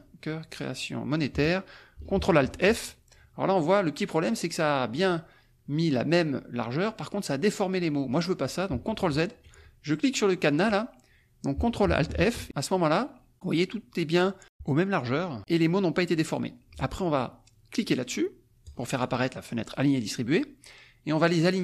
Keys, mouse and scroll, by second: 0.5 shift+click, 1.1 shift+click, 2.5 ctrl+alt+f, 8.9 ctrl+z, 10.6 click, 12.1 ctrl+alt+f, 18.6 click.